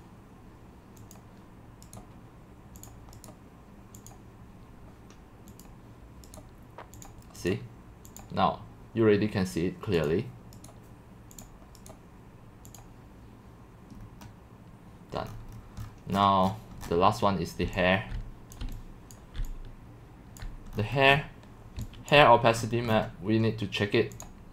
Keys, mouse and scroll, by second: 2.0-2.8 right drag, 2.8-3.3 drag, 3.3-4.1 right drag, 4.1-13.9 drag, 13.9-15.2 scroll down 3, 15.2-16.5 scroll, 16.5-17.7 scroll down 18, 18.5-20.3 typing, 18.5 click, 19.1 click, 20.5 click, 20.7-21.8 scroll down 10, 22.1 click, 22.6-22.9 scroll up 8, 22.9-24.2 scroll down 2, 24.2-24.5 drag.